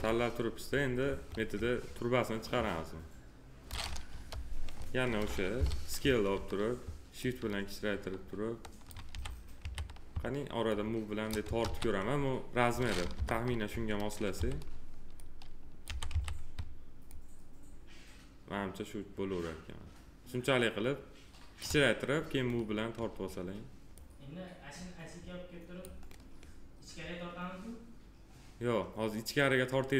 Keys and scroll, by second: 4.1 p, 5.5 r, 9.1 f, 13.1 p, 14.3 r, 15.8 f.